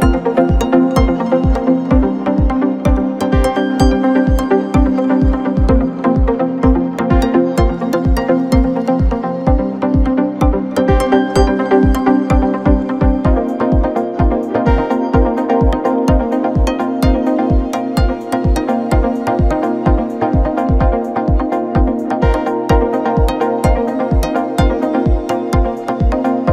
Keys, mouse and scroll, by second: 2.0 click, 2.2 click, 3.4 s, 5.5 click, 6.1 shift+click, 6.6 s, 10.1 click, 10.6 s, 12.3 click, 12.7 s, 13.9 click, 14.0 click, 14.5 g, 16.1 scroll down 2, 16.3 Tab, 16.8-18.1 middle drag, 18.1 scroll up 2, 18.3-19.7 middle drag, 19.7 scroll up 1, 19.9 Tab, 20.3 middle click, 20.8 scroll up 1, 21.0 scroll down 2, 21.2 3, 22.1 click, 22.5 shift+click, 22.9 KP_1, 23.4-24.3 scroll up 2, 24.3 r, 25.4 g.